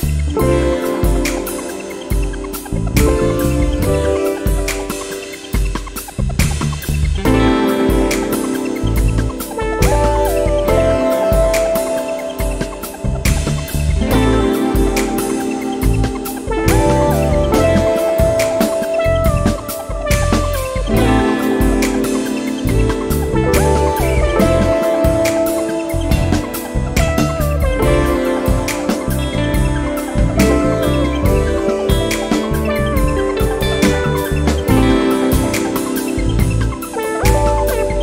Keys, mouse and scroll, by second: 2.4 click, 4.4 click, 5.0 click, 5.8 click, 6.5 click, 8.5 click, 9.4 click, 10.9 click, 14.8 click, 16.7 click, 17.4 click, 18.4 click, 19.9 click, 21.7 click, 22.7 click, 26.0 click, 27.2 click, 28.2 click, 28.8 click, 29.7-30.2 scroll down 1, 30.4 scroll up 1, 30.8 scroll down 2, 31.3 scroll up 2, 32.5 click, 35.5 click, 36.1 1, 36.7 2, 37.3 scroll down 1, 37.9-38.0 scroll up 1.